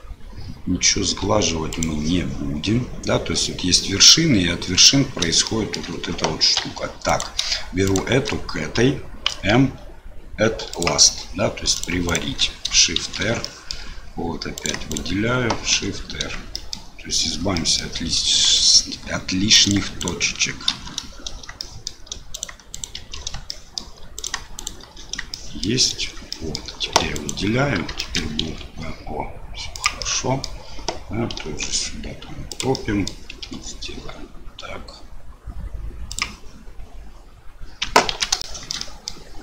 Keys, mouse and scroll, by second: 5.4 shift+middle click, 6.6 1, 7.0 click, 7.8 shift+click, 9.2 m, 11.7 click, 12.0 shift+click, 13.0 shift+r, 13.4 shift+click, 14.5 click, 15.7 shift+r, 16.5 shift+click, 17.5 shift+click, 18.5 shift+click, 19.6 click, 20.0 shift+click, 20.7 shift+r, 21.6 shift+middle click, 22.3 click, 22.7 shift+click, 22.9 shift+r, 23.5 shift+middle click, 24.1 click, 24.5 shift+click, 24.8 shift+r, 25.3 shift+middle click, 26.3 shift+click, 27.0 3, 27.1 click, 28.0 shift+click, 28.5 i, 30.1 click, 31.4 e, 32.8 click, 33.4 i, 38.1 ctrl+z, 38.4 shift+click, 38.7 click.